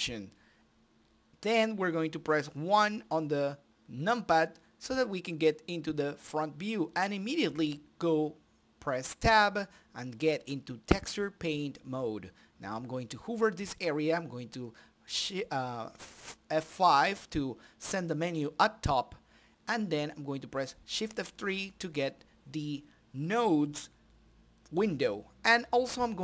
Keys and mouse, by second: 0.2 KP_1, 3.5 t, 4.4 Tab, 9.3-11.3 drag, 11.3 shift+F3, 12.2 n, 13.7-14.7 right drag, 14.8-16.0 right drag, 16.7-18.6 drag, 19.8-23.3 drag, 23.5-25.0 drag.